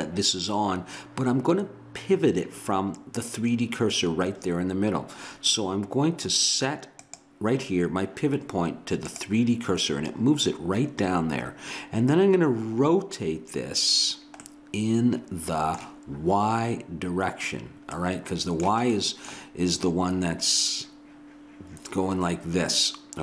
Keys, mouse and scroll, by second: 7.0-8.8 drag, 14.7 middle click, 14.9 middle click.